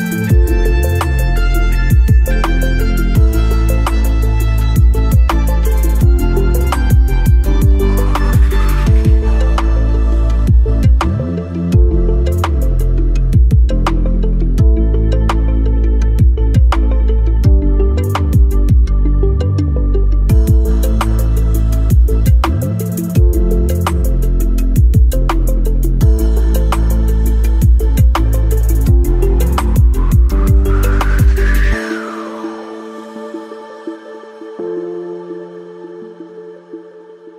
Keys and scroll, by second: 6.7 ctrl+z, 25.0 f, 25.1 r, 25.4 a, 26.8 n, 27.0 k, 32.2 Down, 33.6 Return.